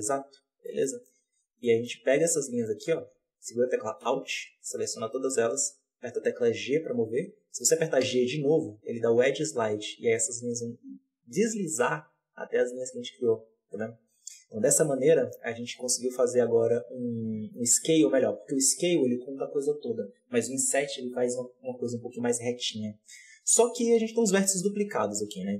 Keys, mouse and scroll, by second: 0.6-0.9 middle drag, 0.9 z, 1.5-2.7 middle drag, 2.7 alt+a, 4.0 alt+right click, 4.6-6.3 middle drag, 6.3 g, 14.5-17.5 middle drag, 23.9 KP_1, 24.0 z, 25.0-25.5 drag.